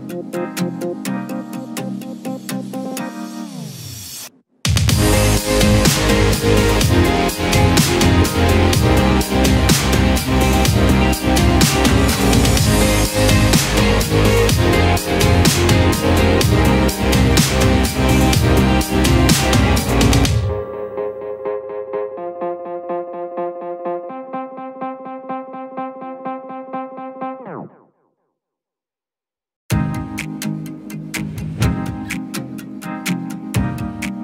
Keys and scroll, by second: 9.7 ctrl+shift+q, 11.9 ctrl+z, 17.5 ctrl+a, 25.1 ctrl+g.